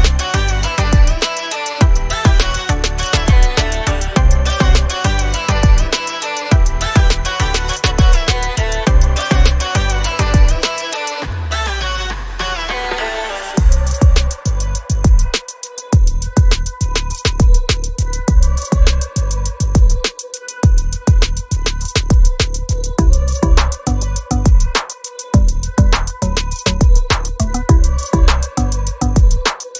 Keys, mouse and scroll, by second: 1.5 click, 2.2 ctrl+z, 2.6 ctrl+z, 3.3 click, 5.6 ctrl+z, 6.1 click, 21.0 click, 21.7 scroll down 1, 23.1 click.